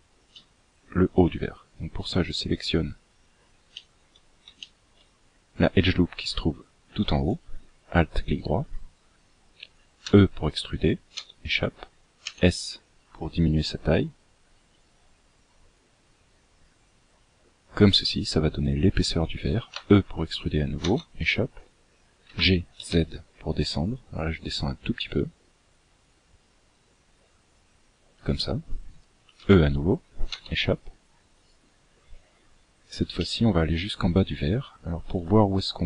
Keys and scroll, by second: 9.5 e, 11.7 s.